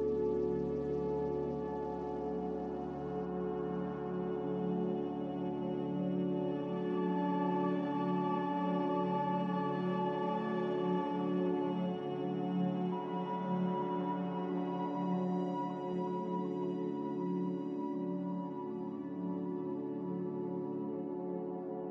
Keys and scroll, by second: 10.6 ctrl+z, 19.0 a, 19.6 Delete.